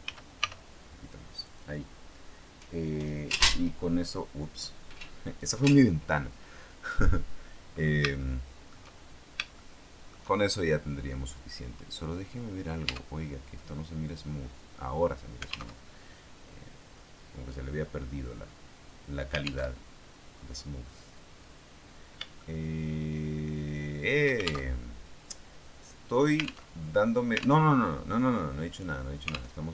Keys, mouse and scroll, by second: 0.3 y, 1.3 click, 8.1 shift+middle click, 9.5 shift+middle click, 12.7 Tab, 14.0 click, 15.7 alt+Tab, 19.7 alt+Tab, 20.1-21.5 scroll down 2, 21.7 scroll down 2, 22.3-24.3 shift+middle drag, 24.7 alt+shift+Tab, 26.7 alt+Tab, 27.5 alt+Tab, 29.5 alt+Tab.